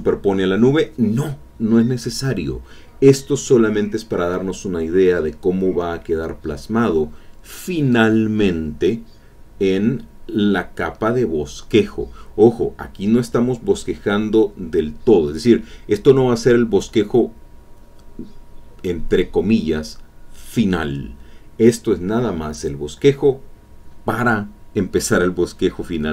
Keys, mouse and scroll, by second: 0.2 alt+Tab, 2.3 click, 6.1-8.6 drag, 17.1 alt+Tab, 17.3 alt+click, 17.4 click, 18.3 alt+Tab, 19.8 click, 21.8-24.1 drag.